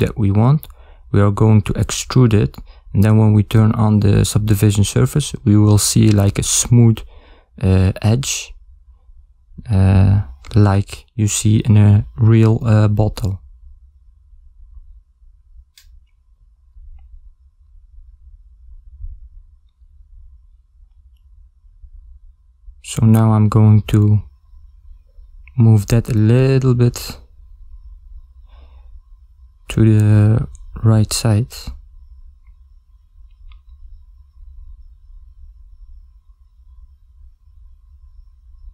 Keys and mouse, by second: 0.5 a, 1.0 ctrl+middle click, 2.0 shift+middle click, 3.3 b, 5.8 g, 8.8 a, 9.5 b, 12.3 g, 16.7 ctrl+middle click, 18.7 ctrl+middle click, 23.2 ctrl+middle click, 23.2 shift+z, 23.7 ctrl+middle click, 25.3 a, 26.1 z, 28.1 shift+z, 29.0 shift+z, 29.7 b, 32.5 g, 35.9 g.